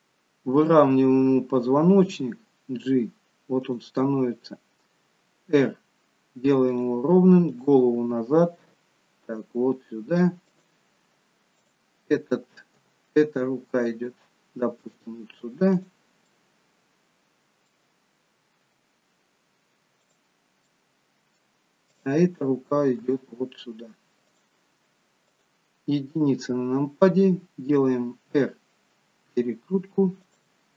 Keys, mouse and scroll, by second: 0.5 click, 2.2 g, 5.7 r, 7.6 click, 8.3 r, 11.6 click, 12.8 g, 16.2 middle click, 18.7 g, 20.7 middle click, 21.9 click, 23.1 g, 25.3 click, 26.2 KP_1, 28.1 r.